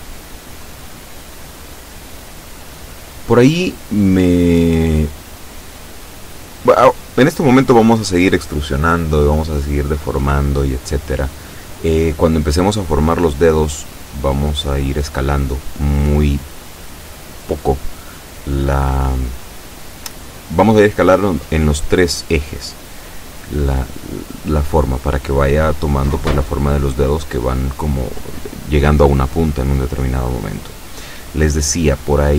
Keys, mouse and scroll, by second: 14.2 a, 15.9 b, 19.5-20.7 drag, 22.2-27.4 drag.